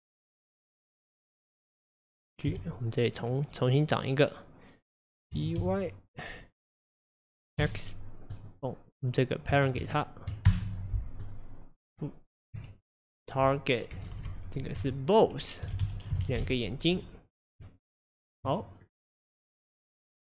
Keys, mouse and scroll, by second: 0.6 click, 2.5 g, 3.4 click, 5.4 e, 6.9 click, 7.6 x, 9.0 click, 9.7 shift+click, 10.5 ctrl+p, 11.8 click, 12.6 F2, 14.2 BackSpace, 14.3 BackSpace, 17.6 Tab, 18.8-19.9 scroll down 3.